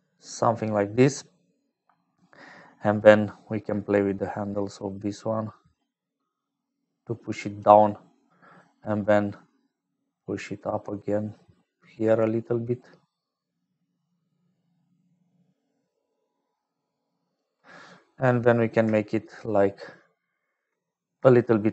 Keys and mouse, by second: 1.3 shift+click, 2.4 shift+click, 3.5-7.5 shift+drag, 8.2 shift+click, 9.2-17.5 shift+drag, 18.3 click, 20.9 click.